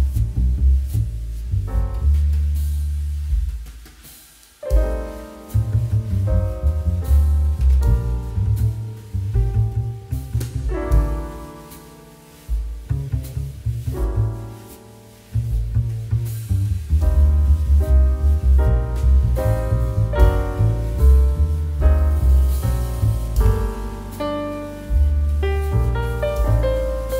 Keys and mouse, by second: 1.8 r, 3.1 9, 3.3 Return, 4.4 click, 4.8 shift+middle click, 5.2 r, 5.3 z, 6.5 click, 6.6 g, 7.5 click, 8.0 r, 9.5 click, 9.9 middle click, 10.3 shift+middle click, 10.6 s, 12.1 click, 12.3 middle click, 12.7 s, 12.9 middle click, 14.0 Escape, 14.5 click, 15.6 click, 15.8 middle click, 16.2 s, 16.4 middle click, 17.4 click, 17.5 middle click, 19.0 g, 19.2 shift+z, 20.2 shift+z, 21.6 click, 21.7 middle click, 23.4 s, 23.5 middle click, 23.9 click, 24.0 middle click, 24.4 g, 26.4 shift+x.